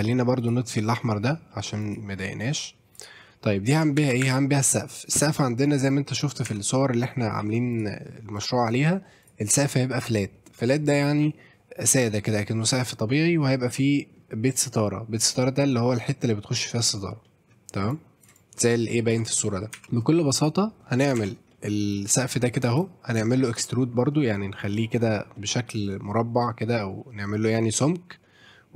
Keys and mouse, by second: 0.4-2.2 drag, 2.7 middle click, 2.9 click, 3.3 middle drag, 3.7 Tab, 4.0 a, 4.2 e, 5.7 shift+click, 6.1 middle click, 6.5 Tab, 7.4 ctrl+a, 8.4-9.3 drag, 9.9-10.5 middle drag, 13.8-14.1 middle drag, 15.3-15.6 middle drag, 17.2 middle drag, 17.9-18.2 drag, 18.4-19.1 ctrl+drag, 19.8 Tab, 19.8 shift+z, 19.9 shift+middle click, 20.6 middle click, 21.0 middle click, 21.2 Tab, 21.5 middle drag, 21.9-22.8 drag, 23.2 click, 24.7 click, 25.0 middle drag, 25.4 middle click, 26.6 middle drag, 28.2 middle click.